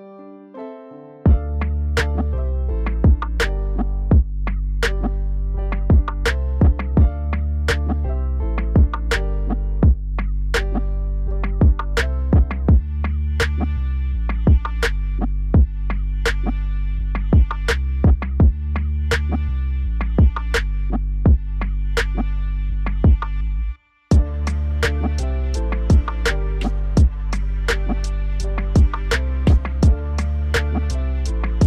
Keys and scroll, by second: 1.3 ctrl+s.